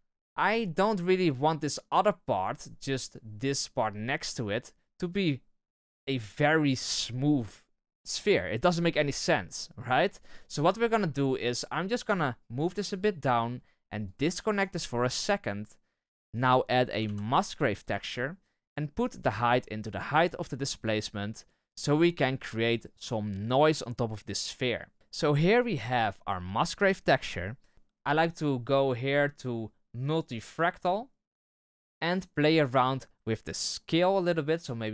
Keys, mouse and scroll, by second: 0.7-1.0 middle drag, 1.0-6.3 scroll up 1, 6.3-10.3 scroll up 1, 10.3-11.9 scroll up 1, 11.9-12.5 scroll up 1, 12.5-14.0 scroll up 1, 14.0-14.6 scroll up 1, 14.6-16.7 scroll up 1, 16.7 shift+a, 20.2-31.6 drag, 34.0-34.9 drag.